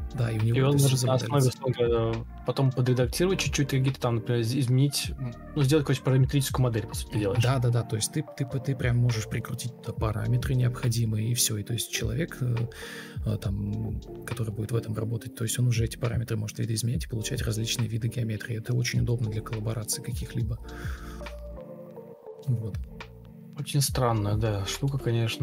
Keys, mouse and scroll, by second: 0.1 Delete, 3.4 ctrl+c, 3.5 ctrl+space, 3.8 ctrl+space, 4.1 ctrl+super+c, 11.3 Escape, 12.5 BackSpace, 12.7 BackSpace, 12.9 BackSpace, 18.2 Escape.